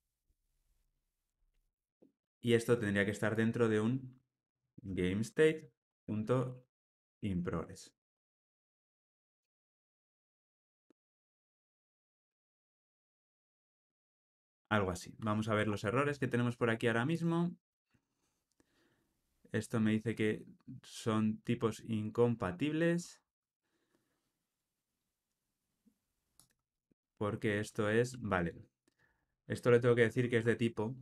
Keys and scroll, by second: 5.5 Return.